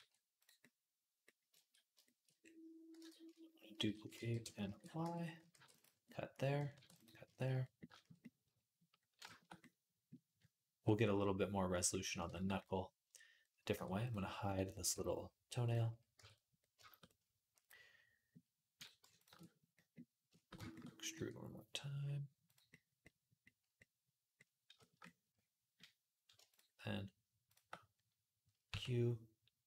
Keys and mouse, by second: 2.8 Tab, 4.0 shift+d, 4.5 ctrl+a, 4.8 Tab, 5.3 ctrl+r, 6.5 ctrl+r, 7.1-15.5 shift+middle drag, 13.6 Tab, 14.8 h, 15.5 click, 15.6-18.5 middle drag, 16.0 Tab, 18.5 click, 18.6 shift+middle click, 19.0 click, 19.0 shift+a, 19.1-26.3 alt+middle drag, 20.9 e, 26.3 shift+click, 26.4-29.6 shift+middle drag, 28.5 q.